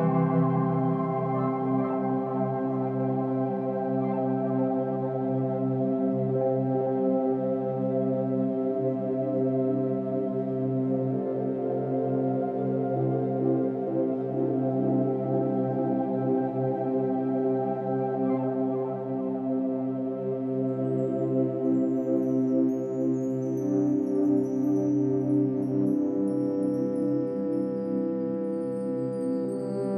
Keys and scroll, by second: 19.3 ctrl+z, 26.2 ctrl+-, 26.3 ctrl+=, 26.5 space.